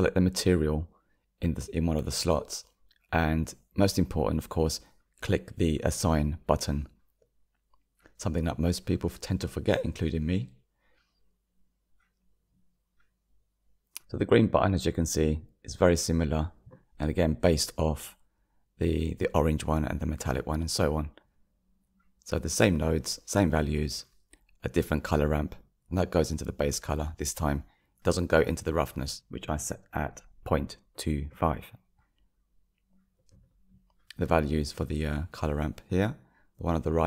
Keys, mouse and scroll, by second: 4.5 click, 10.1 Tab, 11.3 click, 13.0-14.1 drag, 14.1-14.5 scroll down 1, 21.3-23.3 scroll down 1, 25.3 click, 36.4 click.